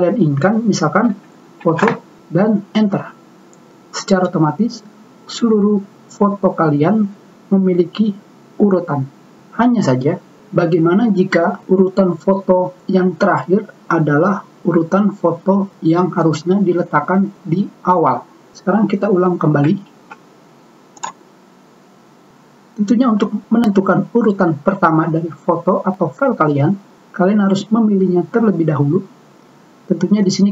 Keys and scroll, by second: 1.1-2.1 typing, 3.4 Return, 20.4 ctrl+z.